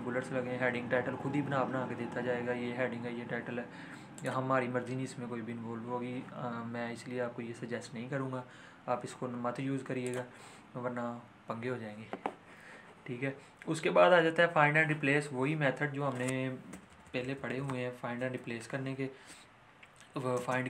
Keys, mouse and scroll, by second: 4.1 click, 10.0 click, 16.0 click, 16.7 ctrl+shift+., 17.5 ., 18.3 ctrl+z, 19.3 Right, 20.3 space.